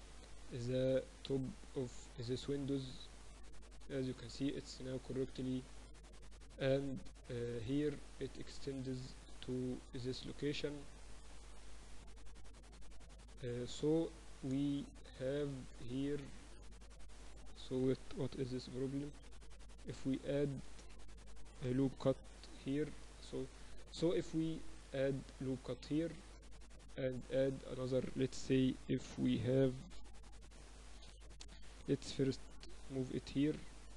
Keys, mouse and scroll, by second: 2.2 Tab, 3.6 click, 4.1-6.5 middle drag, 6.5 click, 7.0-9.7 middle drag, 10.1-11.7 drag, 10.1 right click, 13.3-15.7 middle drag, 15.7 ctrl+r, 18.3 KP_Divide, 18.7 z, 19.5 ctrl+r, 22.1 ctrl+r, 23.9 ctrl+r, 26.9 ctrl+r, 31.5 right click, 32.1-33.1 middle drag, 33.4 click.